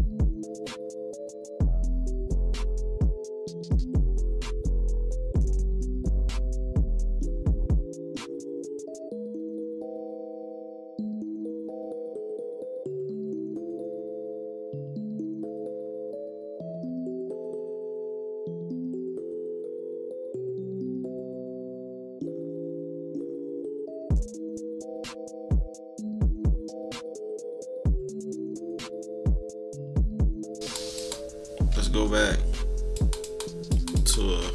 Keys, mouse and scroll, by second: 0.6 click, 1.3 click, 1.9 -, 2.2 scroll up 1, 2.3 =, 2.5-2.9 scroll down 4, 2.7 =, 3.1 click, 3.7 -, 3.9 -, 4.0 scroll up 1, 4.2 -, 4.3 scroll down 1, 4.6 click, 4.9 click, 5.6 click, 5.7 click, 6.3-8.9 typing, 6.5 scroll up 2, 7.4 scroll up 2, 8.1 scroll up 2, 8.3-9.1 scroll down 4, 9.4 click, 9.7 click, 10.5 click, 10.8 click, 11.7 scroll down 2, 11.7 =, 12.4 click, 12.8 click, 13.3 z, 13.7 click, 14.3 click, 15.7 click, 16.9 click, 17.6 click, 18.3 -, 18.4 scroll up 4, 18.6 =, 18.7 scroll down 2, 18.9 =, 18.9 scroll up 2, 19.3 click, 19.8 click, 20.8 click, 21.6 click, 21.9 click, 22.1 click, 22.6 click, 23.1 -, 23.1-23.5 scroll down 4, 23.3 =, 23.6-24.6 drag, 24.6 scroll down 2, 24.8 click, 25.1 click, 25.4 scroll up 2, 25.5 click, 26.2 -, 26.2 scroll up 4, 26.4 =, 26.7 click, 27.3 -, 27.5 scroll up 2, 27.6 =, 28.2 click, 28.5 click, 28.9 click, 29.7 click, 30.2 -, 30.6 click, 30.9-32.0 drag, 32.9 click, 33.2 click, 33.7-34.5 drag.